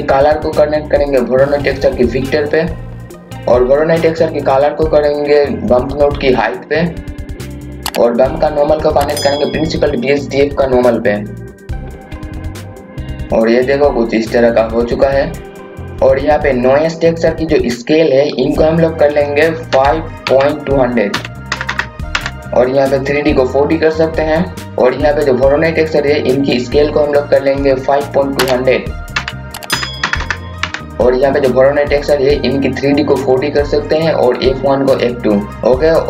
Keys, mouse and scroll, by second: 16.8-18.0 scroll up 1, 18.3 click, 19.7 KP_5, 20.2 KP_Decimal, 21.1 KP_2, 21.5 KP_0, 23.0 click, 28.4 KP_5, 29.1 KP_Decimal, 29.7 KP_2, 30.0 KP_0, 33.3 click.